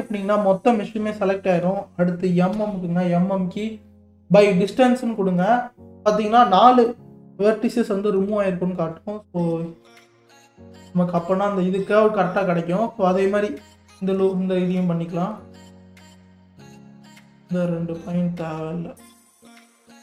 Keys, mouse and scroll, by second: 2.5 m, 9.4 scroll up 1, 10.1 click, 10.6-11.0 scroll down 3, 14.3 alt+click, 15.4-17.3 middle drag, 17.3 shift+click, 17.7-19.1 middle drag, 19.1 shift+click, 19.9 KP_3.